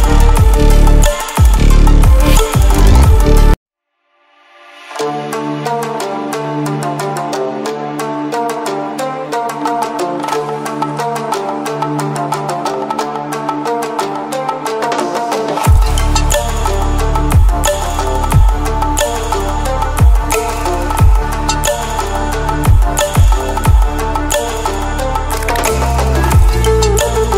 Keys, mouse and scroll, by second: 8.8-15.7 drag, 20.5 click, 22.2 right click, 23.4 click, 24.7 right click, 26.4-27.3 drag.